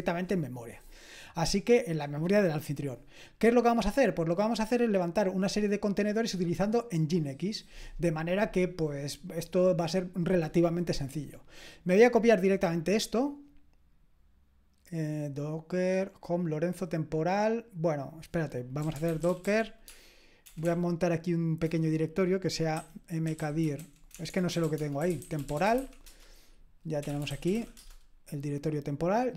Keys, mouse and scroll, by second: 4.1-12.9 scroll down 2, 12.9-15.2 scroll down 1, 15.2-17.4 scroll down 1, 18.1 click, 18.6-28.0 typing.